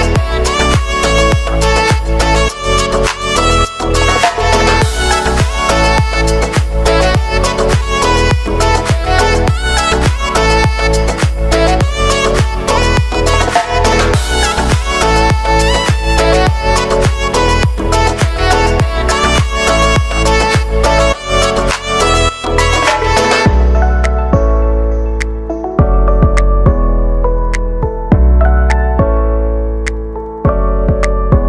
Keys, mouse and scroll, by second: 8.8 j, 9.2 space, 10.8 j, 11.8 click, 16.0 space, 20.7 click, 21.3 space, 23.3 space, 25.6 click, 26.7 space, 29.2 click, 29.8 ctrl+a, 30.4-31.4 typing.